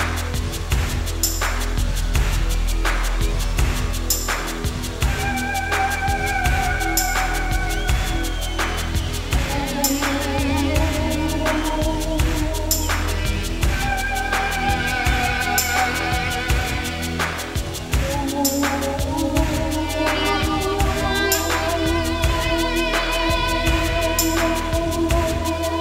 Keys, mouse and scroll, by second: 0.0 z, 6.4 r, 9.6 ", 13.7 typing, 15.8 g, 18.0 click, 19.4 drag, 20.1-25.6 drag.